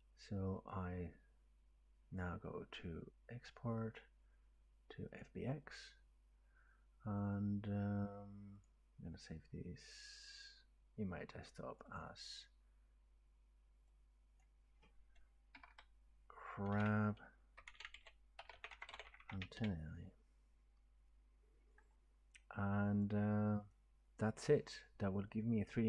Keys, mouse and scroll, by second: 0.7 click, 5.2 click, 8.7 click, 11.8 click, 12.0 click, 12.4 click, 14.4 click, 15.6 Delete, 15.7 Delete, 17.6-19.6 typing, 18.7 click, 23.2 click.